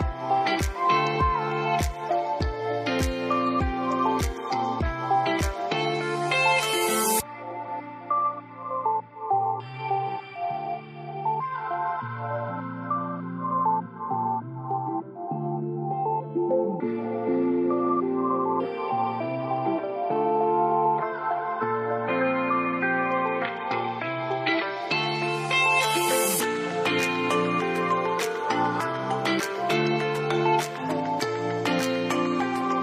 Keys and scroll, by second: 5.4-5.9 typing, 12.2 Tab, 12.2-18.9 typing, 31.7 alt+shift+F3.